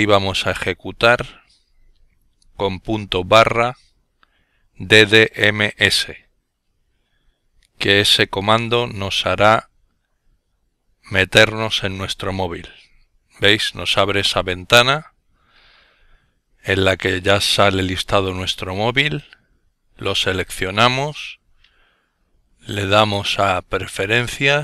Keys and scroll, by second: 1.9-2.7 typing, 4.5-5.7 typing, 6.1 Return.